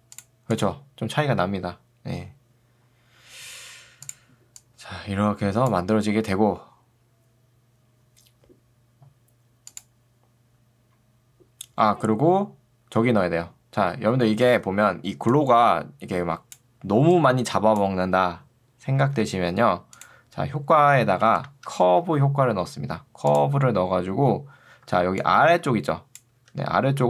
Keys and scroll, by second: 14.5 ctrl+2, 19.1 Escape, 21.3 ctrl+space, 21.7 c, 22.1 r, 24.9 ctrl+2, 26.5 Escape.